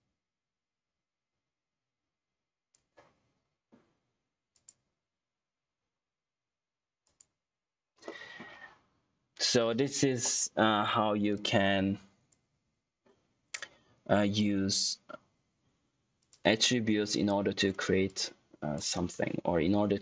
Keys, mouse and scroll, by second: 6.9 click, 8.0 middle click, 11.2 click, 16.1 click.